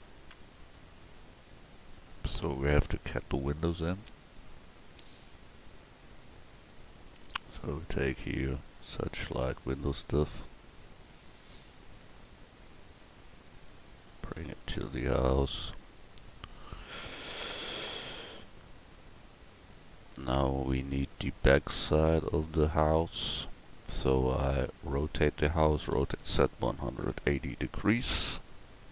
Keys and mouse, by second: 9.1 middle click, 11.2-12.5 middle drag, 15.0-17.0 drag, 16.7 KP_1, 19.3 click, 20.8 middle click, 25.9 r, 28.6 click.